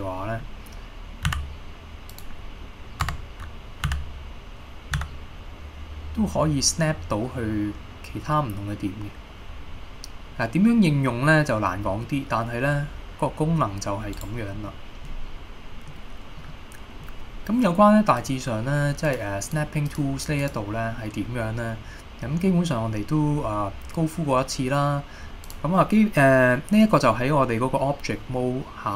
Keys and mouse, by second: 1.4 d, 2.2 click, 3.2 Tab, 4.0 d, 5.1 s, 14.3 right click, 14.8-15.1 middle drag, 16.0 middle click, 16.6-17.1 middle drag, 18.4-21.9 drag.